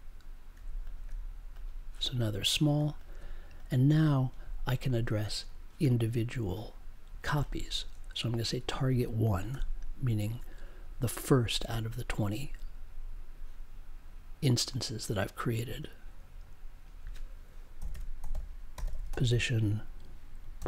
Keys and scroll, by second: 9.5 1, 17.7-20.6 typing.